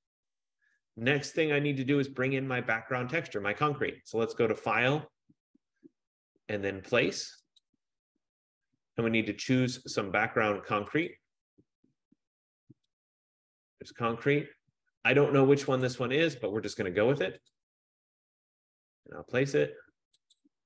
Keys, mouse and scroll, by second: 5.1 click, 7.7 click, 10.5 F15, 11.3 click, 13.2 click, 13.7 click, 16.1 click, 17.8 click.